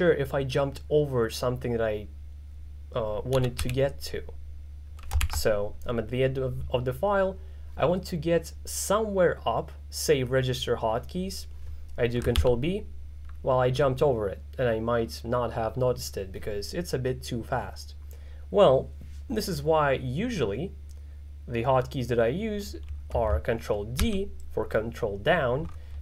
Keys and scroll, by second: 3.4 z, 3.7 t, 5.3 shift+g, 12.4 ctrl+b, 24.0 ctrl+d.